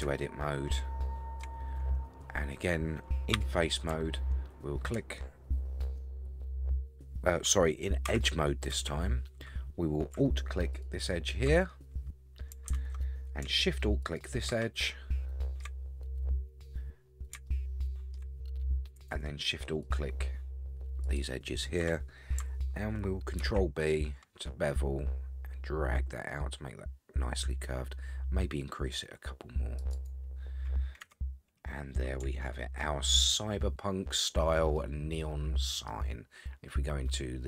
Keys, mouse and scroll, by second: 0.1-1.4 shift+middle drag, 1.6-3.1 scroll up 9, 3.4 3, 8.1 2, 8.1 3, 8.7 2, 10.7 alt+click, 11.6 scroll down 4, 14.0 alt+shift+click, 14.8 shift+middle click, 16.5-17.5 scroll down 6, 17.5 shift+middle click, 18.3-18.7 scroll up 9, 19.8 alt+shift+click, 21.0 alt+shift+click, 23.5 ctrl+b, 29.9 right click, 31.0 Tab, 31.4-32.2 scroll down 11, 32.4-32.8 shift+middle drag, 33.1-34.0 scroll down 1, 34.7-35.9 middle drag, 37.3 middle click.